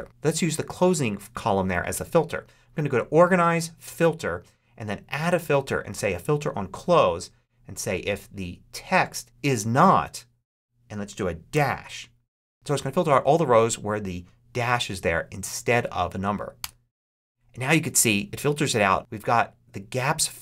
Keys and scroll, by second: 11.4 -, 16.4 Return.